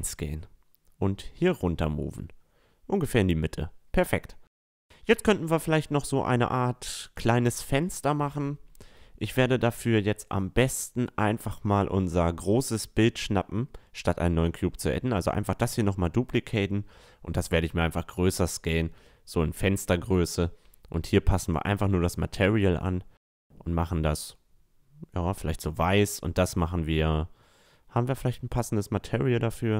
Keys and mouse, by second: 0.7-2.8 drag, 2.5 a, 2.8-3.6 middle drag, 6.0-7.8 middle drag, 10.9-13.0 middle drag, 13.6-15.3 right drag, 14.2 shift+d, 15.5-17.4 drag, 16.4 s, 20.0-22.3 drag, 23.8-25.8 middle drag, 25.1-27.6 drag.